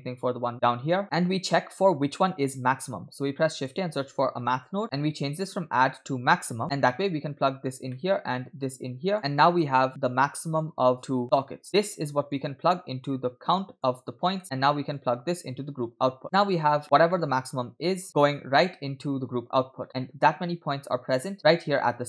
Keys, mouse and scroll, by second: 0.5-1.0 drag, 1.0 scroll down 2, 1.1 middle click, 3.7 shift+a, 4.8-5.3 scroll up 2, 5.4-6.6 drag, 7.0-7.7 drag, 7.9 middle click, 8.7 click, 9.2 middle click, 9.2-9.9 scroll down 5, 10.1-10.7 drag, 11.0 click, 11.5 middle click, 11.7-12.3 scroll up 2, 12.3-13.9 drag, 14.4 middle click, 14.9-16.2 drag, 16.3-17.0 scroll up 4, 17.1 middle click, 18.1 middle click, 20.1-20.5 scroll up 3.